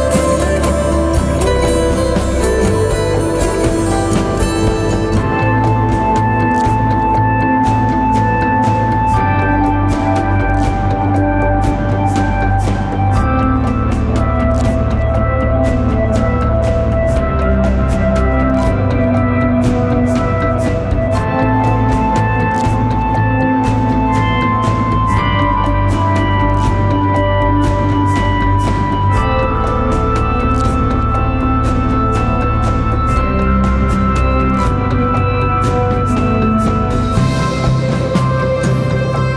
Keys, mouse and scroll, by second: 0.9 alt+scroll down 1, 2.6 ctrl+t, 3.6 alt+shift+click, 7.3 alt+shift+click, 10.4 alt+shift+click, 15.3 alt+shift+click, 17.0 Return, 17.5 Right, 18.6 Right.